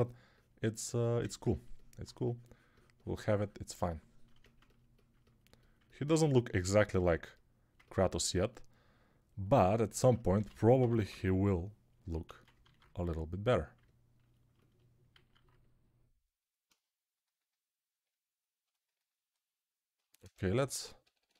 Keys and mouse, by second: 6.8 alt+q, 10.2-11.1 typing, 12.1 ctrl+z, 12.6 alt+q, 15.3 alt+q, 18.7-21.3 ctrl+alt+drag, 18.7-21.3 ctrl+alt+right drag, 20.4-21.3 typing.